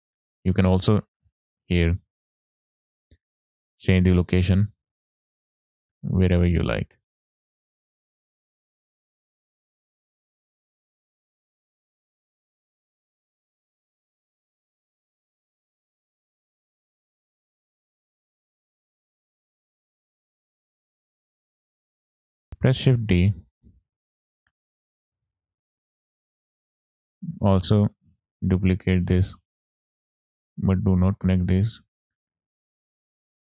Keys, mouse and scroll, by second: 0.0 middle click, 0.6 middle click, 1.3 scroll up 2, 1.4 middle click, 2.1 middle click, 2.5 scroll up 1, 3.3 middle click, 4.6-12.7 drag, 13.3 click, 13.8 ctrl+z, 14.1 click, 14.5 ctrl+z, 14.7 click, 15.5 click, 17.1-19.1 shift+drag, 19.6-20.3 scroll down 7, 19.9 middle click, 20.3 middle click, 20.7 middle click, 20.9-21.5 scroll up 3, 21.2-22.4 drag, 22.5 ctrl+z, 22.5 click, 22.5 shift+d, 23.3 click, 23.5 middle click, 25.7-26.7 middle drag, 27.1 click, 27.3 shift+d, 29.5 click, 29.8 middle click, 30.8-31.9 ctrl+right drag, 31.9-33.0 drag.